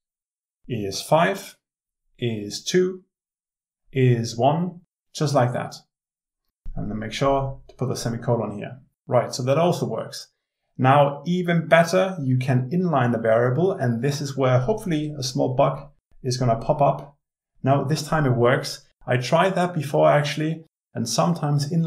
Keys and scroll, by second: 13.5 alt+Return.